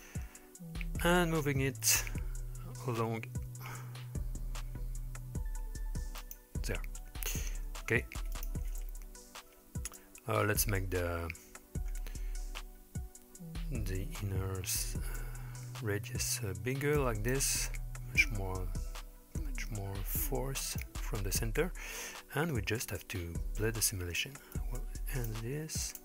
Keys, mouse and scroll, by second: 1.5 g, 7.7 i, 10.0 click, 11.4-12.9 scroll up 6, 15.2-17.3 drag, 18.2-20.8 drag, 21.3-22.6 scroll down 3, 22.6-23.3 scroll down 5, 24.5 click, 25.9 click.